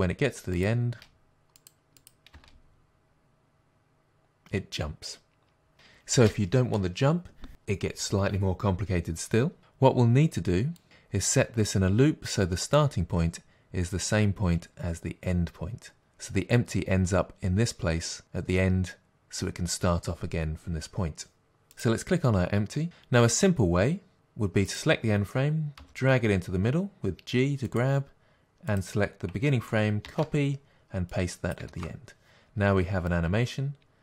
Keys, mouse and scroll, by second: 1.0 space, 1.6 click, 2.0 click, 2.3 space, 6.1 space, 10.8-21.8 drag, 24.1 click, 25.8 g, 27.8 click, 31.2-34.0 drag, 31.8 ctrl+v.